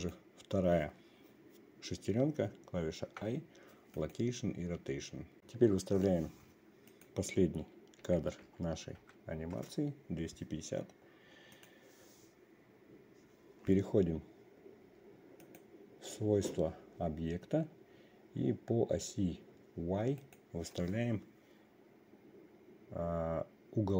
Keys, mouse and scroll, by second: 0.5 click, 3.6 i, 7.5-10.2 drag, 12.0 click, 15.9 click, 20.7 click.